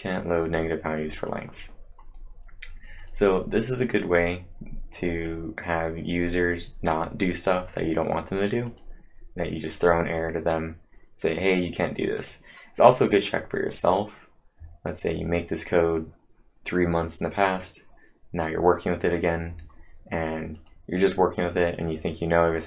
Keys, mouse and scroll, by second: 1.2 click, 2.1 scroll up 1, 3.0 click, 3.8 click, 8.6 click, 8.6-9.0 scroll up 1, 11.3 click, 19.7-20.6 scroll up 2, 20.6 click, 21.0 click.